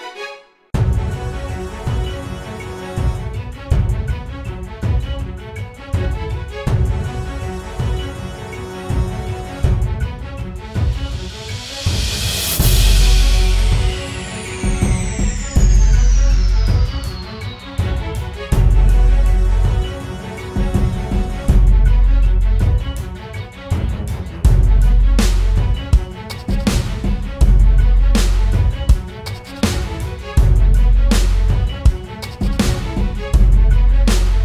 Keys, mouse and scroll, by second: 12.4-13.4 typing, 16.3 typing, 20.4-21.3 scroll up 1, 21.3 typing.